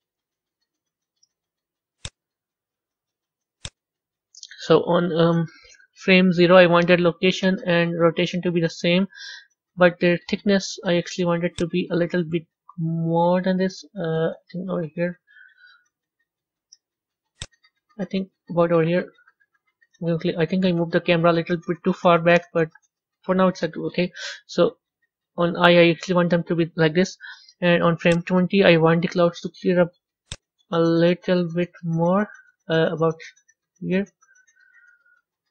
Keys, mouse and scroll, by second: 1.1-7.4 drag, 7.4 i, 8.4 i, 9.7 middle click, 11.6-14.6 drag, 17.4-20.5 drag, 26.0 i, 28.2-28.8 drag, 30.3 click, 30.8-31.2 drag, 31.5 click.